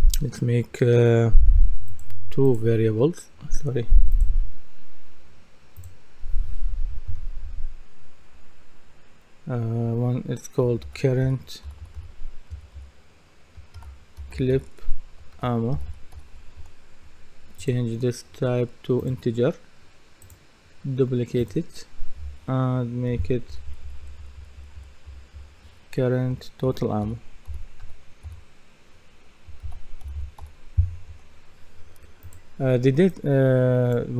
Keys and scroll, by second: 7.1 F2, 11.4-12.5 typing, 14.3-16.6 typing, 23.1 Right, 23.5 BackSpace, 27.6-28.3 typing, 29.4-30.9 typing, 31.1 Return.